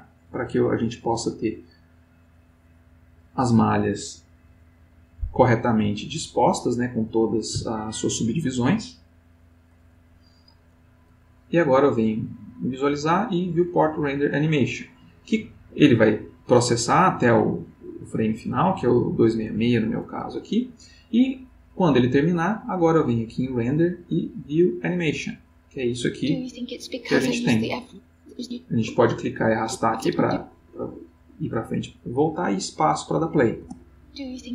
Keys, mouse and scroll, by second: 11.7 click, 18.1-19.5 drag, 23.0 click, 24.9 click, 26.6 click, 27.8-31.2 drag, 33.6 space.